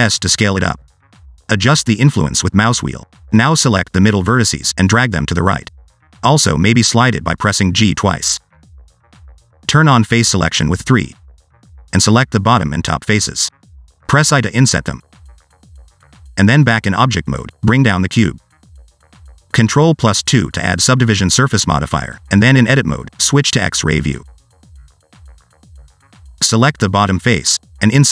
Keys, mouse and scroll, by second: 3.5 click, 5.4 click, 5.5 g, 8.8 g, 10.5 alt+z, 11.5 o, 12.4 3, 12.7 scroll down 1, 12.7 middle click, 13.1 click, 13.4 middle click, 14.1 shift+click, 14.4 middle click, 14.8-15.2 scroll up 1, 15.2 i, 17.4 Tab, 18.0-18.6 scroll down 4, 18.6 click, 19.2 click, 20.3-21.0 scroll up 5, 20.7 shift+middle click, 21.2 shift+middle click, 22.5 ctrl+2, 23.6 Tab, 24.7 1, 25.3 alt+z, 25.8 click, 26.8 s.